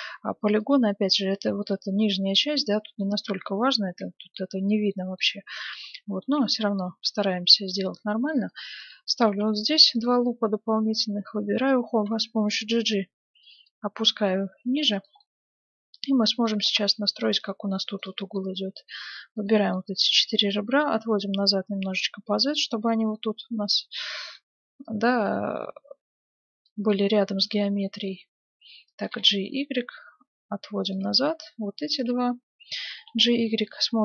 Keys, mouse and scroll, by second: 1.6-3.4 middle drag, 4.9-6.7 middle drag, 6.2 ctrl+r, 9.2 ctrl+r, 10.8-12.6 right drag, 11.9 g, 15.3-21.4 middle drag, 17.9-20.5 right drag, 20.5-22.2 drag, 21.0 right click, 23.1-24.8 middle drag, 24.8-26.6 drag, 26.9-28.9 middle drag, 29.0 g, 31.4-33.6 right drag, 32.8 g.